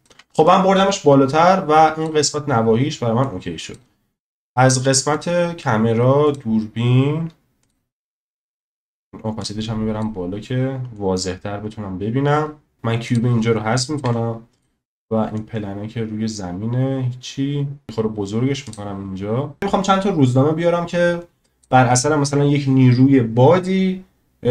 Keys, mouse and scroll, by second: 0.4-2.1 drag, 3.2-3.7 drag, 6.3 click, 7.6 click, 9.5 click, 11.0-12.7 drag, 14.0 Delete, 14.6 click, 19.6-21.6 drag.